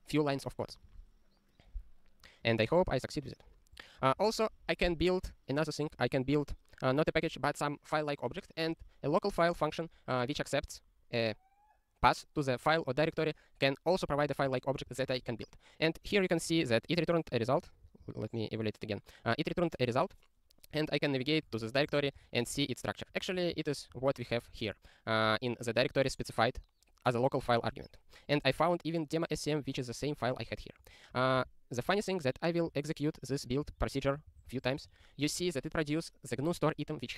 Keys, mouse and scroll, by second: 2.6 scroll down 1, 3.8 click, 4.2 ctrl+p, 10.3 click, 14.3 click, 14.3 ctrl+n, 14.5 ctrl+e, 14.7 ctrl+b, 15.1 ctrl+e, 17.5 super+o, 18.2 ctrl+e, 31.9 super+o, 32.8 ctrl+e, 33.3 ctrl+e, 33.7 ctrl+e, 34.1 ctrl+e, 34.3 ctrl+e, 34.5 ctrl+e, 34.7 ctrl+e, 34.9 ctrl+e.